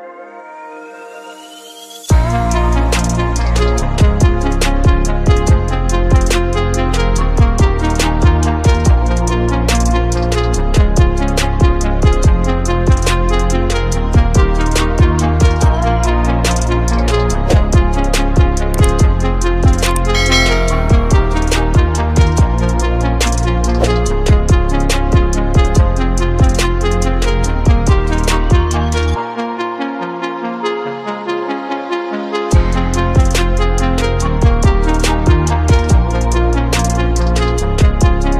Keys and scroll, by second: 12.2 space, 17.7 ctrl+space, 18.4 ctrl+space, 22.9 space, 26.4 space, 29.3 space, 35.1 space.